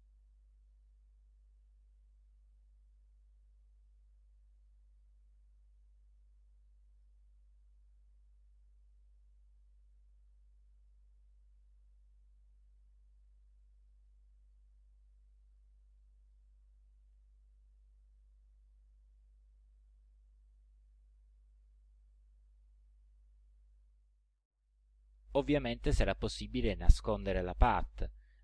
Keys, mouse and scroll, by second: 3.0 click, 4.6 click, 7.0 click, 8.0 ctrl+a, 9.9-11.1 drag, 11.9-13.4 drag, 13.5 click, 15.2 click, 15.9 click, 20.1-21.3 drag, 23.9 click, 24.5 click, 26.1 click.